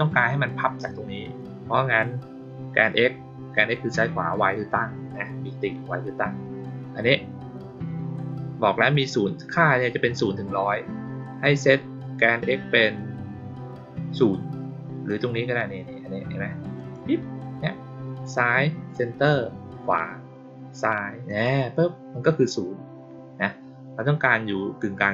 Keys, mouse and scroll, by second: 16.7 click, 21.2 click.